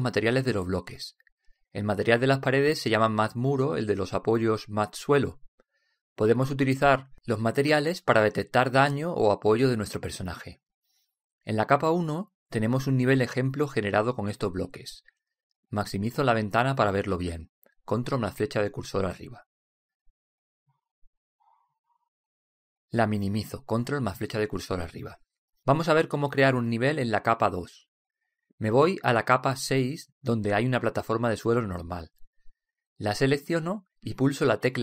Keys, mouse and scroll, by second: 14.0-15.6 drag, 17.2 ctrl+Up, 18.6 middle click, 19.5 middle click, 20.4-23.6 middle drag, 24.1-26.2 middle drag, 26.2 ctrl+Up, 30.4-32.6 middle drag, 32.6-34.4 drag, 34.2 right click, 34.4-34.8 middle drag.